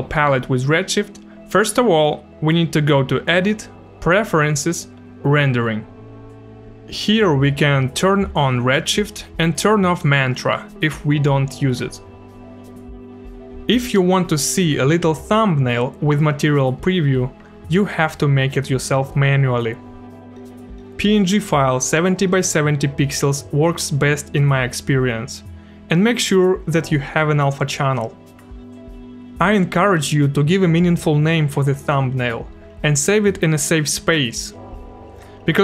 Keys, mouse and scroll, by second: 1.2 click, 2.7 click, 4.3 click, 5.6 click, 6.9 click, 9.4 click, 10.9 click, 12.8 click, 13.1 click, 15.2 click, 16.9 click, 18.1 click, 19.5 click, 21.2 click, 23.3 click, 24.3 click, 26.2 click, 27.3 ctrl+v, 28.5 KP_Enter, 30.2 click, 32.4 click, 34.0 click.